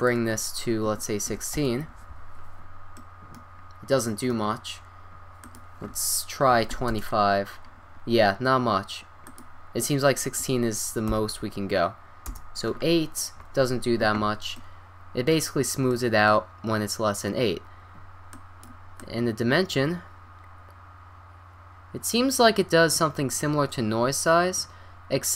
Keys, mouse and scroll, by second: 3.0-4.8 middle drag, 5.4-7.3 drag, 9.3-12.2 drag, 13.9-15.1 middle drag, 18.3-21.0 drag.